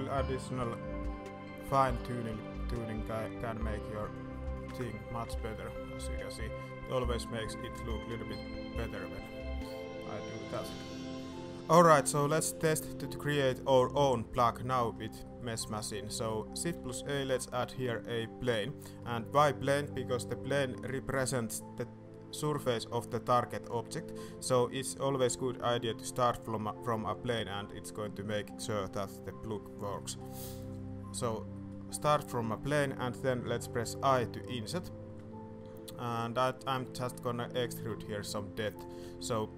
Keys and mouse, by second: 0.6 k, 5.2 Tab, 5.5-5.8 middle drag, 6.6 middle click, 7.6 shift+middle click, 8.3 Tab, 9.1 ctrl+r, 12.0 middle drag, 12.5 shift+middle click, 14.5 middle drag, 15.2 middle drag, 15.6 shift+middle click, 16.1 middle click, 16.7 shift+a, 18.9 click, 19.8 drag, 29.9 click, 30.4 shift+click, 31.2 shift+click, 31.6 drag, 32.1 Tab, 34.0 i, 36.9 click, 37.2 shift+click, 39.0 s.